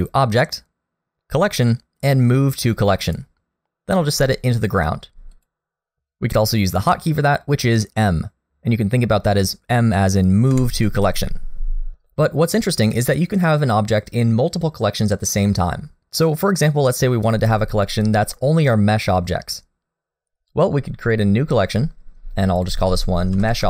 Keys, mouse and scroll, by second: 10.5 m, 21.7 click, 22.5 click, 22.7 click.